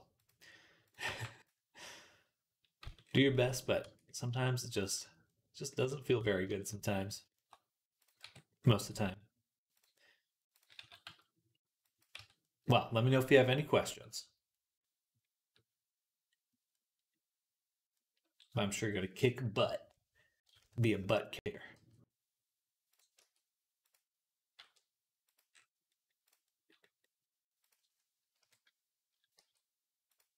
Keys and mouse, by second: 0.0 click, 0.0 middle click, 0.0 right click, 0.7 click, 0.7 middle click, 0.9 b, 2.7 z, 2.8-5.2 right drag, 3.7 Tab, 4.6 click, 4.6 middle click, 5.3 right click, 5.6-12.0 right drag, 7.8 click, 7.8 middle click, 8.1 Tab, 10.6 s, 12.0 Tab, 12.1-14.6 right drag, 19.4 KP_1, 20.4 click, 20.4 KP_3, 21.6 g, 22.7-25.7 drag, 23.0 r, 24.4 r, 25.7-28.2 right drag, 26.1 click, 27.5 click, 28.2 KP_3, 29.2 g, 29.9-30.3 drag.